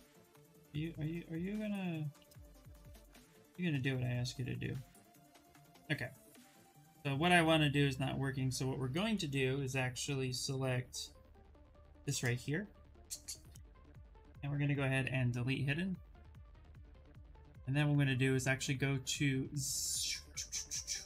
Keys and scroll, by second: 14.6 2.